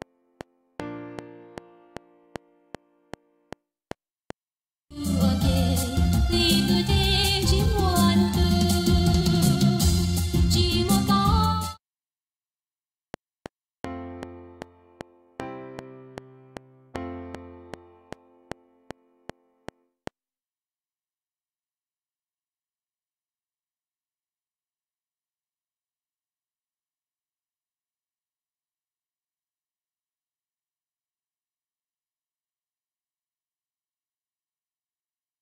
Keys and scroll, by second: 4.3 space, 11.5 space, 13.0 F7, 20.3 space, 23.5 Right, 23.8 Left, 26.3 Tab, 30.3 Tab.